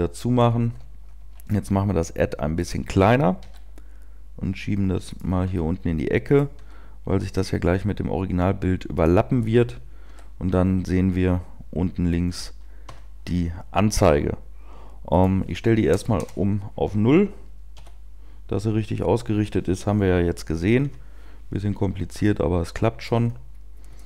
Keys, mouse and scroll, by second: 0.4 scroll down 2, 1.1 s, 2.7 click, 3.3 g, 5.1 click, 5.4 s, 6.5 click, 6.7 g, 9.0 click, 22.1 shift+middle click, 23.2-23.7 scroll up 2, 23.7 scroll down 1, 23.9 shift+middle click.